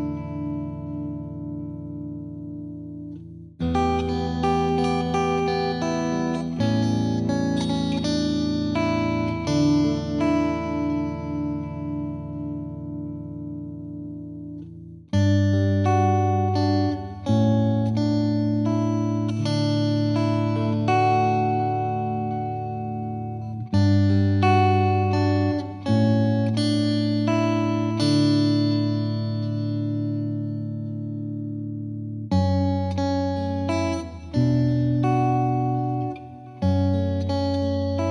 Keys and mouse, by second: 3.2 right click, 3.5 click, 4.7 click, 6.3 click, 9.1 Home, 11.1 Caps_Lock, 12.5-12.9 typing, 14.6 BackSpace, 14.8 BackSpace, 15.0 BackSpace, 15.7 Caps_Lock, 19.6 click, 30.7 click, 32.7 click, 33.6 shift+click, 35.5 shift+click, 37.7 shift+click.